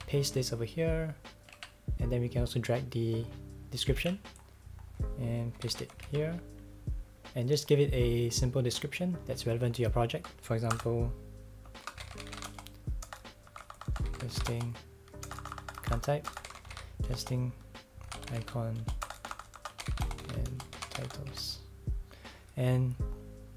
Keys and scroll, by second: 0.0-0.1 typing, 1.6 super+s, 4.0 super+c, 5.3-6.3 typing, 10.7-20.4 typing.